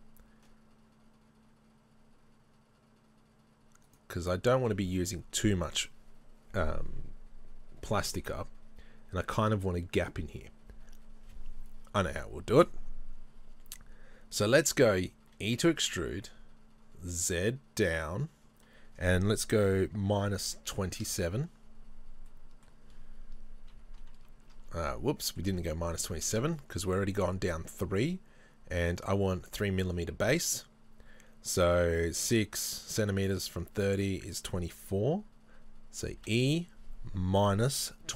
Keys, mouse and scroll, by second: 4.0 right click, 4.5 middle click, 4.9 ctrl+z, 15.2 e, 19.3 e, 21.2 KP_Enter, 21.8-22.3 scroll down 2, 22.3-23.8 middle drag, 23.7 KP_3, 24.2 KP_1, 25.3 shift+middle click, 25.6 scroll up 1, 26.2 ctrl+z, 26.6 shift+middle click, 36.1 e.